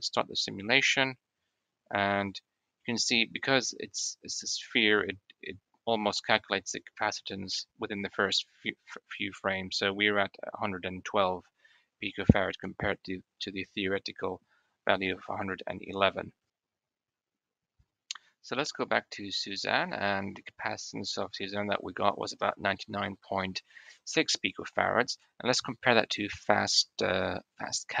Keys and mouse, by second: 0.5 click, 3.8-5.0 drag, 5.0-6.4 middle drag, 19.8 middle click, 20.3 shift+middle click.